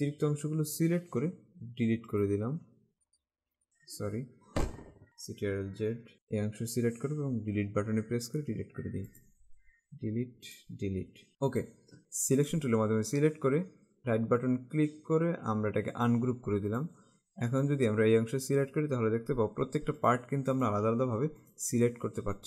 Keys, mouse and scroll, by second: 1.3 Delete, 2.1 click, 2.5 Delete, 3.2 Delete, 3.3 click, 3.6 Delete, 5.1 ctrl+Caps_Lock, 5.8 ctrl+z, 6.1 click, 8.2 Delete, 9.1 click, 9.7 Delete, 10.5 click, 10.8 Delete, 11.7 click, 12.6 click, 14.3 right click, 16.0 click, 20.2 click.